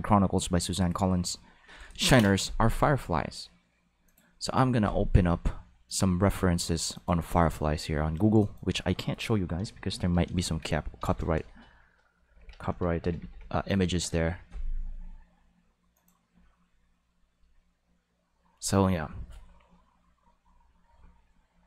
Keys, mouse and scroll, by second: 4.0 click, 5.9 click, 6.9 click, 8.4 click, 10.2 g, 11.3 Left, 12.2 f, 12.3 i, 12.7 e, 13.3 i, 14.0 Return, 15.9 click.